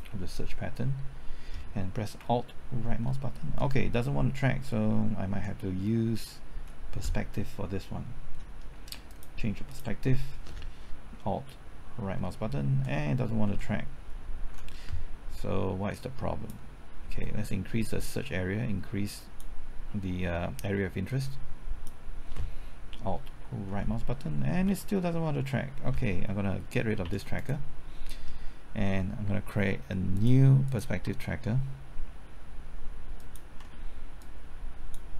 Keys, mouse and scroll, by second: 2.8 alt+Right, 6.5 Left, 8.3 middle click, 9.0 click, 11.9 alt+Right, 13.4 typing, 14.4 Left, 15.9-22.6 drag, 22.9 typing, 23.6 alt+Right, 24.2 alt+Right, 27.0 x, 27.3 click, 33.1 ctrl+click, 34.1 click.